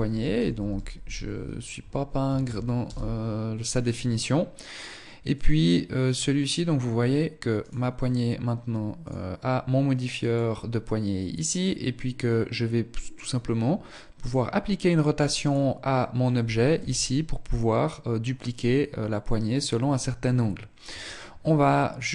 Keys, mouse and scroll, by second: 4.6 click, 6.9 right click, 8.2 click, 13.5 right click, 14.7 right click, 16.0 r.